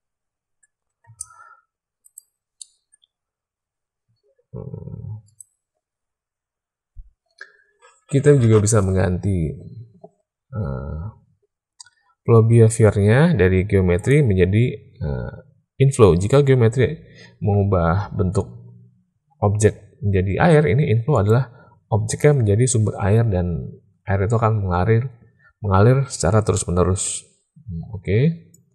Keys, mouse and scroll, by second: 1.0 space, 2.0 click, 2.5 middle click, 5.2 click, 14.0-21.2 drag, 26.6 middle click, 28.5 click.